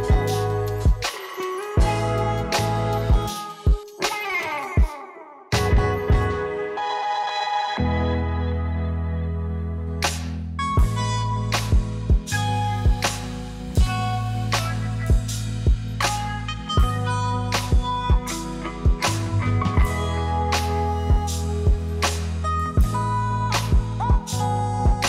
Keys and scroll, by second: 1.7 ctrl+d, 10.1 0, 12.3 0, 14.9 ctrl+d, 17.4 u, 23.0 0.